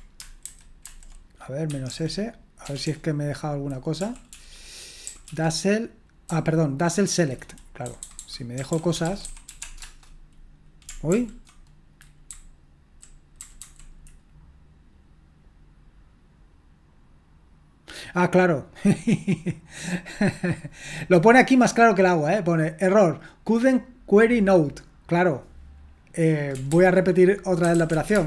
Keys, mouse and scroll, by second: 0.5 alt+b, 0.8 alt+b, 1.4-2.7 typing, 4.0 Right, 4.3 Right, 5.1 Right, 5.3 Right, 6.3 Left, 6.9-7.9 Left, 8.3-13.5 typing, 26.7 ctrl+c, 27.4-28.2 typing.